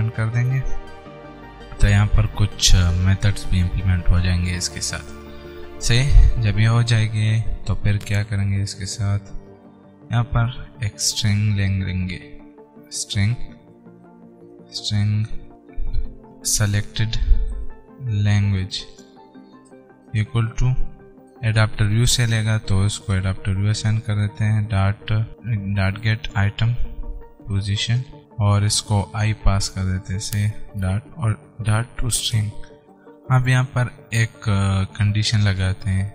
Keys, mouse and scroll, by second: 0.1 Return, 1.3 scroll down 1, 13.8 shift+s, 14.8 Return, 15.4-22.4 typing, 21.1 alt+Tab, 23.2 Return, 24.3 ., 25.3 alt+Tab, 25.6-26.9 typing, 28.1 Return, 28.2 alt+Tab, 29.5 typing, 30.8 Right, 31.6-32.8 typing, 33.7 click, 34.8 Return.